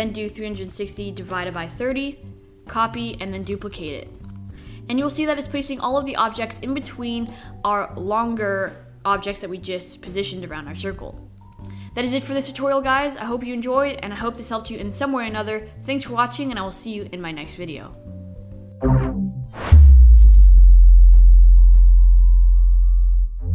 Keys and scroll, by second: 0.2 alt+3, 0.2-1.9 typing, 2.8 super+0, 3.0 super+d, 4.3 super+z, 4.8 super+d.